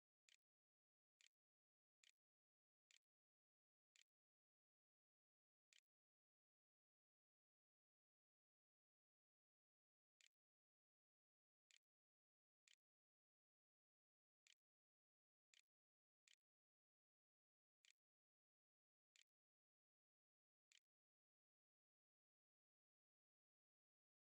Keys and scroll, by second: 0.1 Tab, 1.0 space, 1.8 n, 2.7 o, 3.8-6.6 typing, 8.9-20.5 typing, 21.8 r.